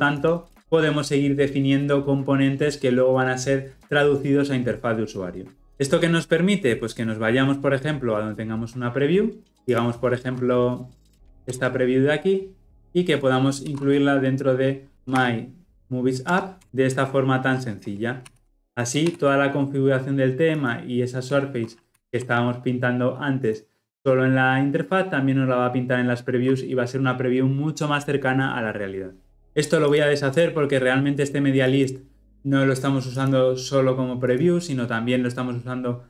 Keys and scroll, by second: 16.4 Return, 18.2 ctrl+x, 19.2 ctrl+v, 21.9 ctrl+alt+l, 22.1 ctrl+alt+o.